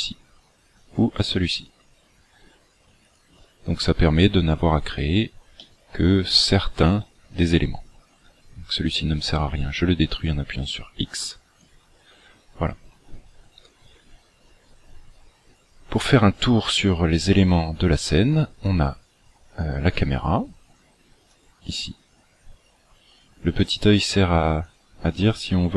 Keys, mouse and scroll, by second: 4.5-5.5 scroll down 4, 5.5 shift+middle click, 11.1 x, 18.7 click, 19.8 click, 21.3 click, 24.6 click, 25.1 click.